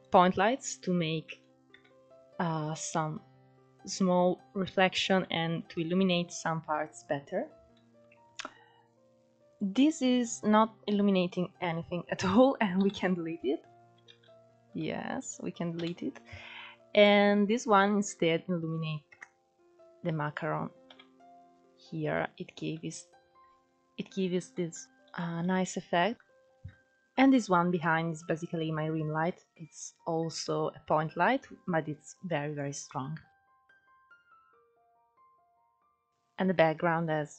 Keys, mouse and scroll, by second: 0.2 click, 1.4-1.9 shift+middle drag, 1.9 KP_0, 2.5-3.3 scroll up 4, 3.3-4.0 scroll up 4, 4.1-5.1 scroll down 4, 5.1 scroll down 1, 5.4 middle click, 5.8-6.2 scroll up 3, 6.2 middle click, 7.1-7.9 scroll down 2, 7.9-9.7 middle drag, 9.7 click, 10.0 scroll down 2, 10.2-11.9 middle drag, 11.9 scroll up 1, 12.8 Delete, 13.8-14.2 scroll up 6, 14.2 ctrl+z, 14.9-15.8 scroll down 5, 15.8 Delete, 17.1 click, 17.4-17.9 scroll up 4, 17.9-19.2 middle drag, 19.2 KP_0, 19.9-20.9 scroll up 2, 20.9 Delete, 22.8 ctrl+z, 23.6-24.6 scroll up 1, 24.6-27.2 shift+middle drag, 33.3 h, 33.9 ctrl+z, 34.2 scroll down 3, 34.5-35.1 middle drag, 35.1-35.8 scroll down 1, 35.8 click, 36.3-36.7 scroll up 2.